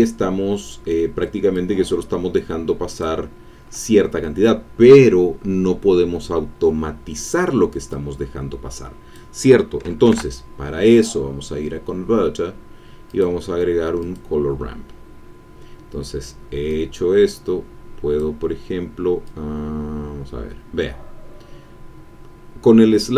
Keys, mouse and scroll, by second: 1.5-3.2 drag, 7.9-9.8 drag, 10.0 shift+a, 13.0 click, 16.7-18.4 drag, 19.2-23.1 drag.